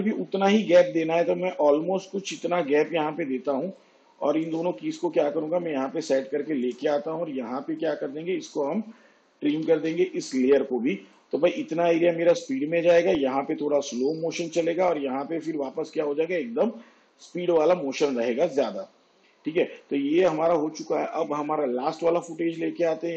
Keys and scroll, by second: 9.4 alt+].